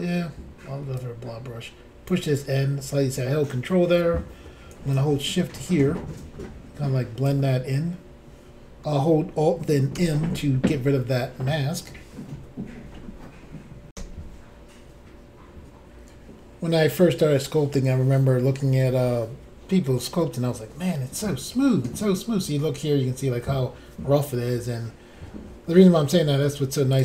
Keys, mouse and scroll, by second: 1.0 ctrl+click, 4.9 shift+click, 10.0 alt+m, 13.9 Insert, 22.5 scroll up 1, 24.3 middle click, 26.9 click.